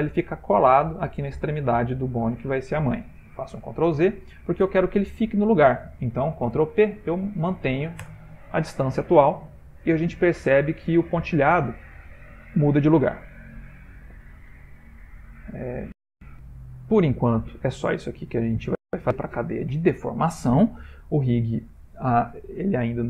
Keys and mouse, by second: 3.6 ctrl+z, 6.4 ctrl+p, 14.2 shift+middle click, 16.4 ctrl+middle click, 17.1 ctrl+middle click, 17.8 shift+middle click, 18.3 ctrl+middle click.